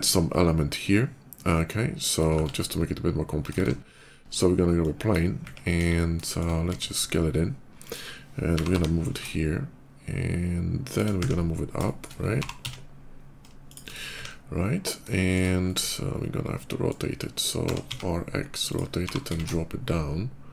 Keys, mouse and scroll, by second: 2.2 shift+a, 3.4 shift+a, 4.6 click, 5.6 KP_5, 5.8 middle click, 6.1 middle click, 6.5 s, 7.7 click, 8.3 g, 8.5 y, 8.7 g, 10.7 shift+click, 11.7 shift+middle click, 12.1 g, 12.4 z, 12.6 g, 13.5 shift+click, 14.1 middle click, 14.9 shift+middle click, 15.4-16.7 shift+middle drag, 17.5 r, 17.7 x, 18.5 click, 18.8 g, 19.1 z, 20.1 z.